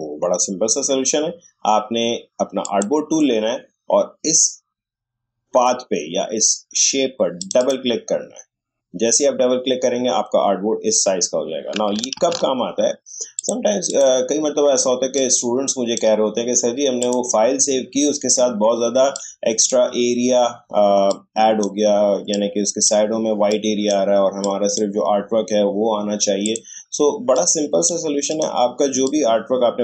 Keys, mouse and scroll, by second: 2.6 click, 7.4 click, 11.9 click, 12.1 ctrl+z, 13.3-21.1 drag, 21.1-29.8 shift+drag.